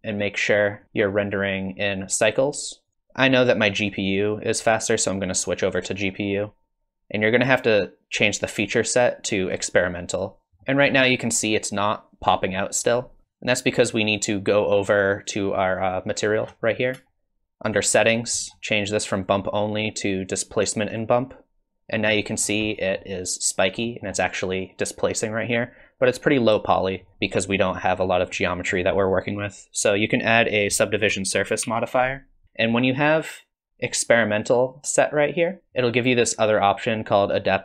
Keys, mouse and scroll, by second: 0.8 click, 1.1 click, 2.9 ctrl+s, 4.6 click, 8.6 click, 10.6 middle click, 13.2 click, 14.8 click, 16.4-17.7 scroll down 24, 17.7 click, 17.7-19.1 scroll down 5, 19.1 click, 22.0 middle click, 22.7 middle click, 23.8 scroll up 1, 23.9 middle click, 27.1 click, 27.8 middle click, 28.3 middle click, 31.6 ctrl+2, 33.4 click.